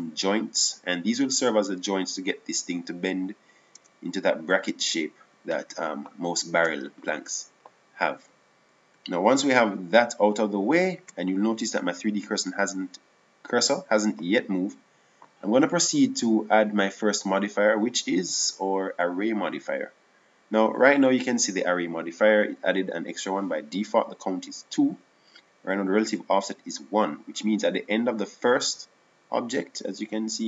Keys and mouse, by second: 0.0 Tab, 4.1 Tab, 17.8 click.